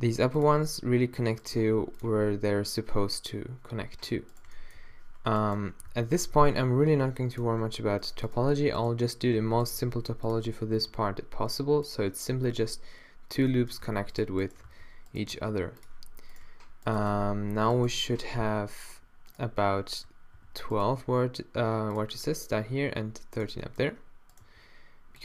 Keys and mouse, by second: 1.6 g, 4.8 z, 5.9 alt+w, 6.3 z, 6.6 g, 9.4 f, 9.7 g, 10.8 g, 13.9 a, 14.7 alt+w, 15.3 g, 15.9-17.1 drag, 17.1 d, 18.9 shift+right click, 20.4 f, 20.9 g, 24.4 g.